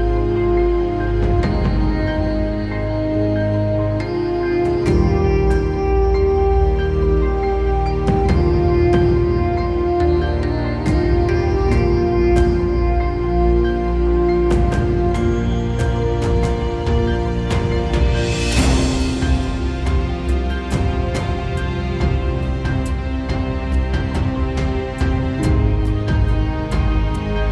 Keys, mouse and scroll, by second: 4.7 middle click, 6.2 middle click.